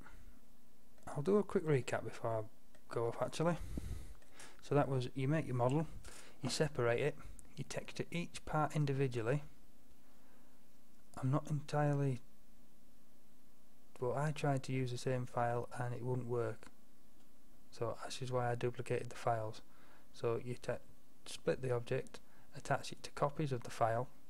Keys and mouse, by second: 1.1 drag, 1.1-4.2 middle drag, 4.2-5.0 drag, 5.0-24.2 middle drag.